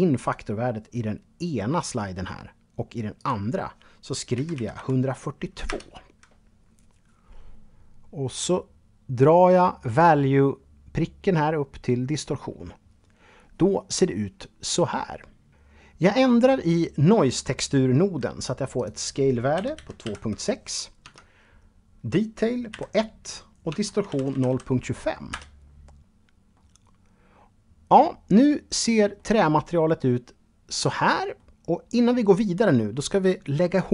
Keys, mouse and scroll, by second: 3.5 KP_1, 3.9 KP_2, 4.8 Return, 9.1-11.3 drag, 17.9 click, 18.7 KP_2, 18.9 KP_Decimal, 19.2 KP_6, 20.2 Tab, 21.9 KP_1, 22.9 Tab, 23.2 KP_0, 23.5 KP_2, 23.7 KP_5, 24.5 Return, 25.7-30.7 middle drag, 31.1-32.2 scroll down 1, 32.2-32.8 scroll down 1, 32.8-33.2 scroll down 2, 33.6 shift+middle click.